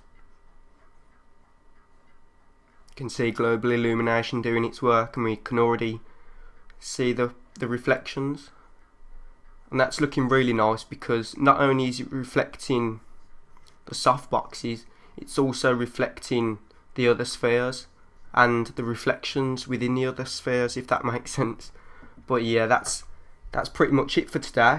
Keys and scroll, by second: 23.7 3, 24.4 3.